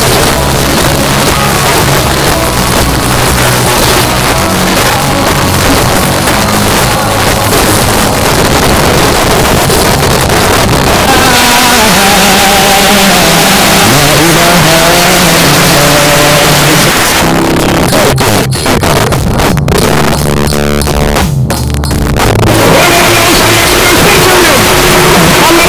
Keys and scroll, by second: 16.9 Page_Down.